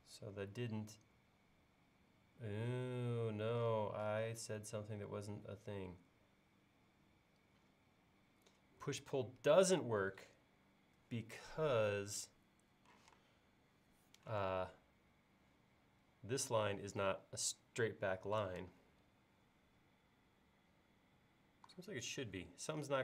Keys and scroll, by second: 13.0 p, 14.4 space.